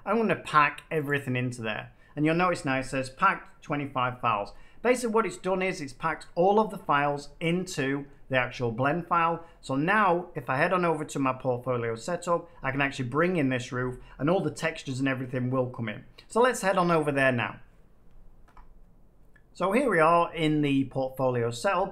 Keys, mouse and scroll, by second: 1.0 click, 6.1 middle click, 8.0 middle click, 18.4 F9, 21.5 middle click.